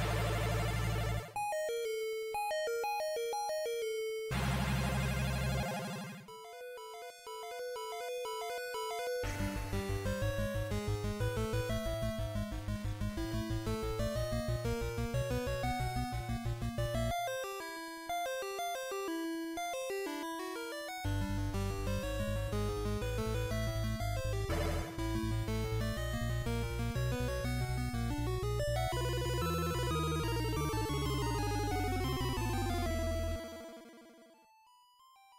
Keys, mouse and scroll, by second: 2.2-6.0 click, 7.3 click, 8.2 z, 10.5 z, 11.0 middle click, 18.8 scroll up 3, 19.8 middle click, 22.1 click, 23.3 click, 27.9 scroll down 2.